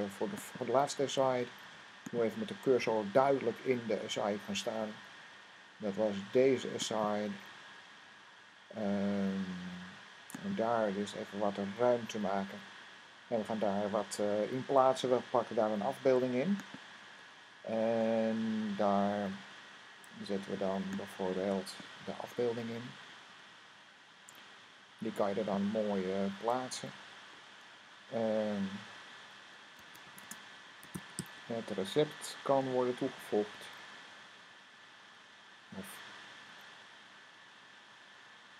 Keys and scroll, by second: 13.1 Up, 29.4-33.0 typing.